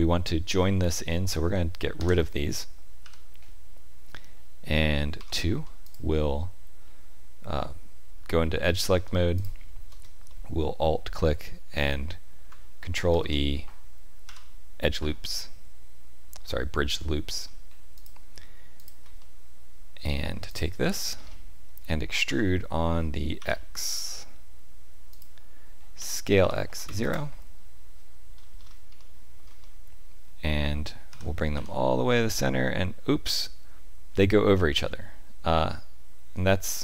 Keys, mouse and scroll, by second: 1.9 Delete, 5.1 2, 5.8 alt+click, 9.3 alt+shift+click, 10.2 middle click, 13.1 ctrl+e, 15.3 middle click, 17.9 click, 18.7 shift+click, 19.1 middle click, 20.4 alt+click, 20.9-21.3 scroll down 6, 22.2 e, 25.9 s, 28.3-28.8 scroll down 6, 28.9 shift+middle click, 29.6 middle click, 31.1 g.